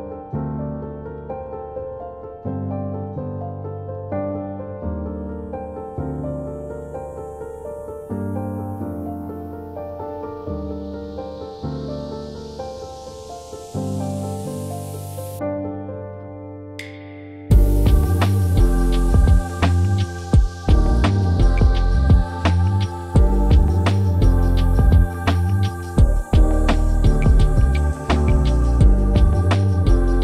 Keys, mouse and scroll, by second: 4.2 click, 7.7 ctrl+click, 8.5 right click, 10.4 click, 12.1-13.3 typing, 15.4-22.2 drag.